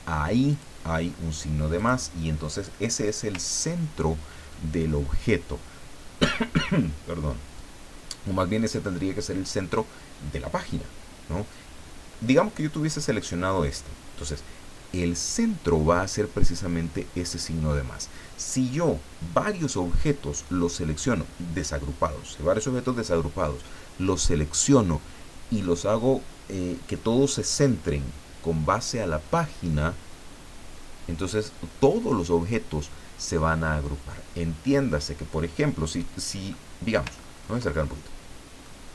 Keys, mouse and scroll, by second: 0.5 click, 1.8 click, 3.4-4.1 ctrl+scroll down 2, 12.9 click, 37.1-37.5 ctrl+scroll up 2, 37.7 ctrl+click, 37.9 ctrl+middle click, 38.2 click.